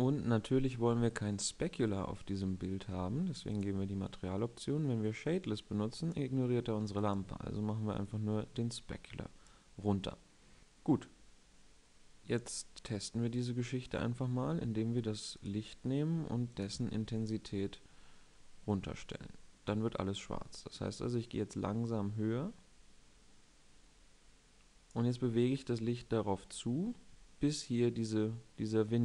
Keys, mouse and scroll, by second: 10.1-10.7 middle drag.